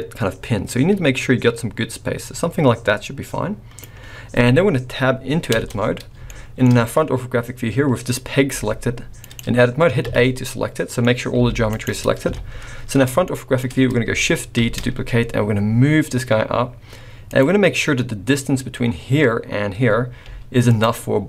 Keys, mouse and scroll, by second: 5.5 Tab, 6.2 shift+middle click, 6.7-7.0 scroll up 1, 8.5 g, 10.0 a, 10.3-10.8 scroll down 2, 10.8 middle click, 11.4 g, 12.2 KP_1, 12.9 scroll up 2, 13.2 shift+middle click, 14.6 shift+d, 20.2 g.